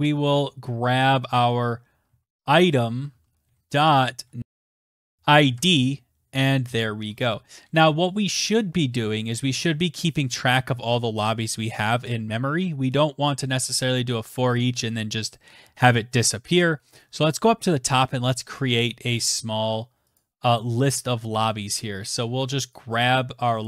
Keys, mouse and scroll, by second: 0.0-5.7 typing, 7.6-8.3 typing, 11.8-13.2 drag, 13.8 click, 14.3-15.4 scroll down 14, 15.4-16.6 scroll, 16.6 scroll, 17.4 click, 18.1 ctrl+c, 18.3 ctrl+v, 19.3 click, 19.5 click, 20.0 click, 23.3 Right.